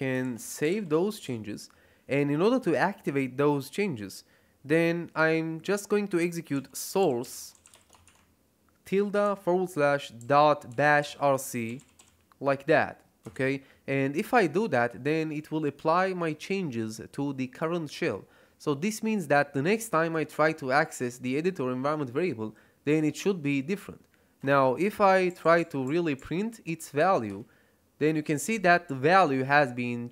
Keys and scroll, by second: 0.0-1.1 typing, 1.2 Return, 6.2-12.4 typing, 13.2 Return, 27.2 Return.